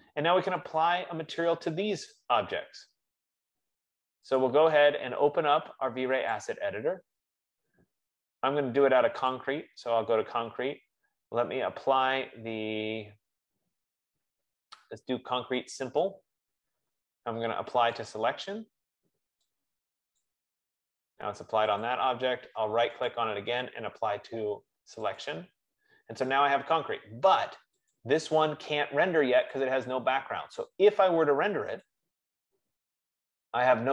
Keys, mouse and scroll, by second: 1.2 click, 2.5 click, 4.7 click, 6.8 click, 9.8 click, 13.0-13.5 scroll, 13.6 middle click, 16.4 right click, 18.3 click, 20.7 click, 22.1 click, 23.3 right click, 25.5 click, 28.4 click, 29.9 click, 32.2 click.